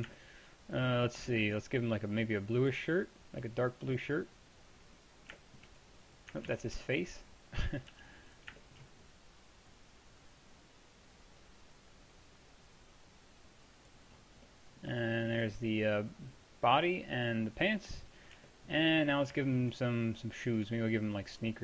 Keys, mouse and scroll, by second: 2.0-5.9 drag, 5.9-6.6 middle drag, 6.6 ctrl+z, 6.6-7.6 drag, 8.0 f, 14.5 drag, 14.8-15.2 middle drag, 18.7-20.6 middle drag, 20.6-21.6 drag.